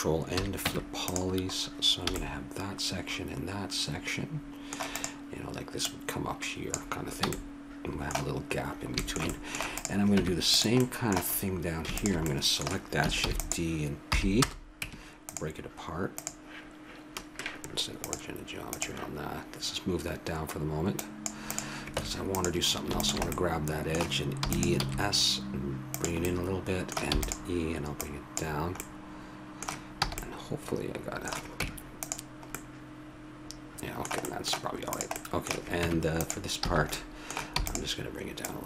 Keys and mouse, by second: 0.3 ctrl+n, 0.3 a, 0.6 Tab, 2.1 a, 2.2 middle click, 4.9 right click, 5.6-7.7 drag, 7.2 a, 7.3 middle click, 9.8 right click, 10.1 Tab, 13.3 shift+d, 14.1 p, 14.8 Tab, 16.1-17.7 right drag, 17.7-19.8 drag, 20.9 click, 21.9 Tab, 24.4 e, 24.8 s, 24.8 middle click, 26.3 middle click, 27.1 e, 28.0-29.2 drag, 30.0 a, 31.6 Tab, 35.1-36.9 drag, 35.8 Tab, 36.6 a, 37.5 e, 38.4 click.